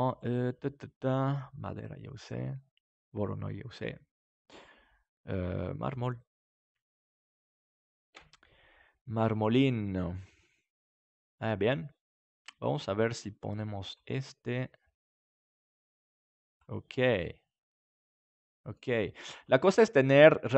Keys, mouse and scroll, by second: 0.0-5.5 drag, 8.1 KP_Decimal, 9.6-11.3 middle drag, 12.6-17.6 drag, 17.2-20.5 middle drag.